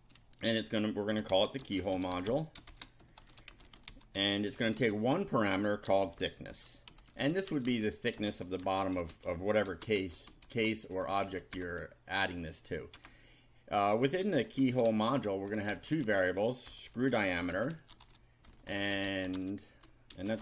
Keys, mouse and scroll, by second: 1.0-10.4 typing, 10.0 shift+Return, 11.0 shift+Up, 11.3 shift+End, 11.5 shift+Return, 13.0 Return, 14.4-20.4 typing.